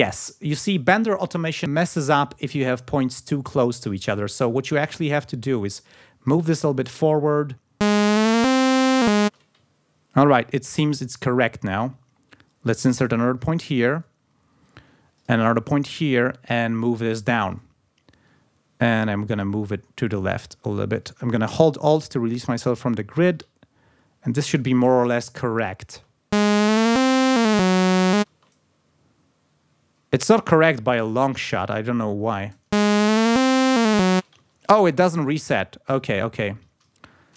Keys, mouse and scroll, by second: 0.4 ctrl+scroll up 2, 1.6-4.4 drag, 5.2-6.5 drag, 6.9 click, 7.5 space, 9.2 space, 9.7-10.2 ctrl+scroll up 2, 11.4 ctrl+scroll down 2, 11.8 ctrl+scroll up 2, 12.8 click, 15.2 click, 16.5-17.7 drag, 18.0 ctrl+scroll up 2, 19.6-23.5 drag, 23.6 ctrl+alt+scroll down 3, 25.9 space, 28.3 space, 32.2 space, 34.1 space, 34.5-34.8 ctrl+scroll up 2, 36.0-37.3 alt+drag.